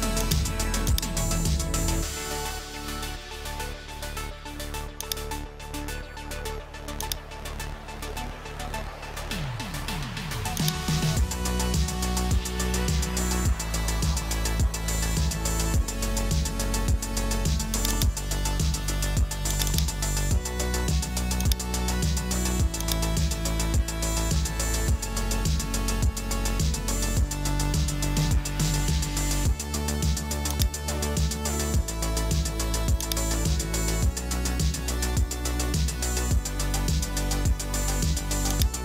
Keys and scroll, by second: 14.7 Return, 24.0 super+a, 24.8-26.8 typing, 27.8 super+a.